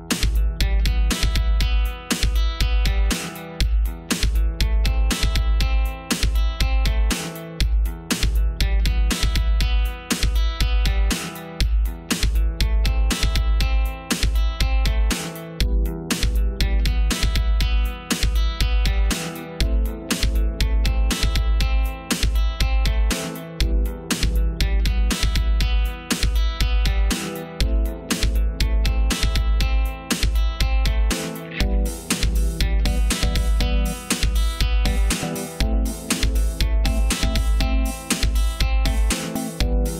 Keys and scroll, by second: 14.3 ctrl+z, 27.9 ctrl+c, 28.1 ctrl+v, 32.3 ctrl+v.